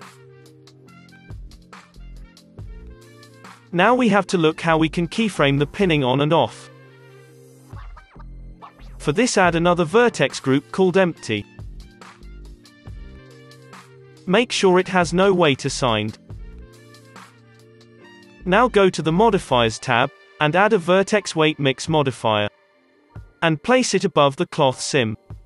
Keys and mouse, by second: 3.2-5.0 drag, 5.0-6.8 middle drag, 6.8 click, 7.1-8.7 middle drag, 8.7-13.4 drag, 13.7 Tab, 14.3-15.7 drag, 15.7-16.9 middle drag, 17.5-22.5 drag, 18.3 space, 23.9-25.4 drag.